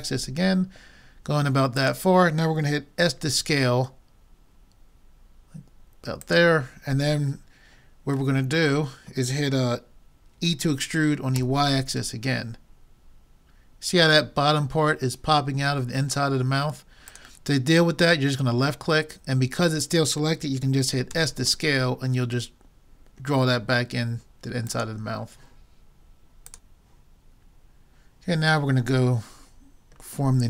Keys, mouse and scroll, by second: 3.0 s, 8.4-10.3 middle drag, 10.5 e, 21.2 s, 28.7 middle click.